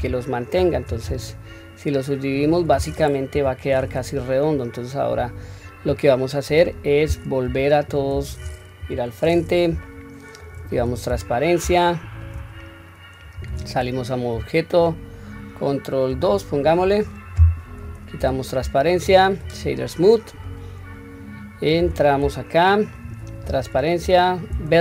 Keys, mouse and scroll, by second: 3.3 KP_1, 3.7-5.8 scroll down 1, 5.8-6.4 scroll down 1, 6.4-7.0 scroll up 1, 7.4 /, 8.8 KP_1, 9.9-10.4 shift+middle drag, 10.7 q, 11.2-11.8 scroll down 2, 11.9 shift+middle click, 12.5-13.4 scroll up 3, 13.4 Tab, 16.1 ctrl+2, 18.2 q, 18.9 right click, 21.8 Tab, 23.4 q, 24.0 1.